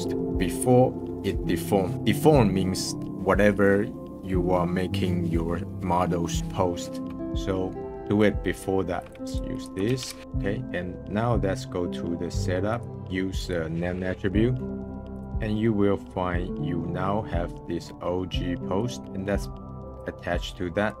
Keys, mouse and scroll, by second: 6.4 middle click, 7.3-9.0 scroll down 1, 9.0-13.0 drag, 13.1 shift+a, 15.1-19.0 drag, 20.9 click.